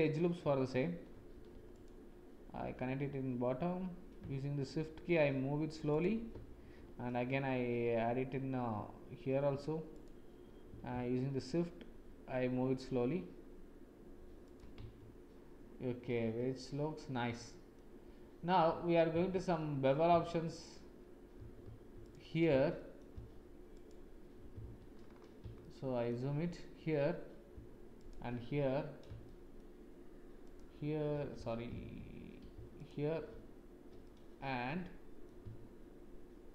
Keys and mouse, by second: 1.1 ctrl+r, 6.6 ctrl+r, 15.0 Tab, 16.0-17.7 drag, 19.1 Tab, 21.3 2, 21.6 2, 22.7 shift+click, 23.7 alt+click, 24.6 shift+z, 25.6 shift+click, 28.0 alt+shift+click, 29.2 shift+click, 31.3 ctrl+z, 34.0 click, 34.5 middle click.